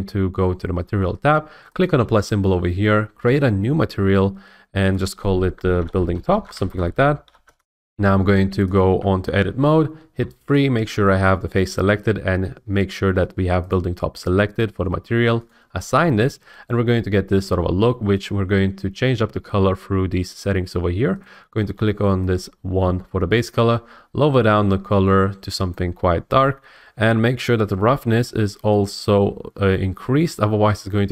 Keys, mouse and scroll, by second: 1.8 click, 3.4 click, 4.9 click, 5.7-8.4 typing, 8.7 click, 9.0 Tab, 10.2 3, 10.5 click, 13.7 click, 15.5 click, 18.2 click, 21.2 click, 25.7 click.